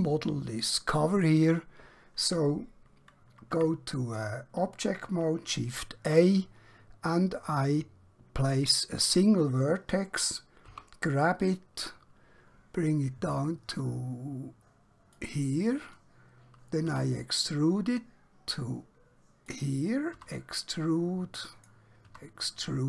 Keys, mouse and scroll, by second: 3.6 Tab, 10.7 g, 15.2 click, 16.9 e, 19.5 click, 20.3 e, 21.6 click, 22.1 e.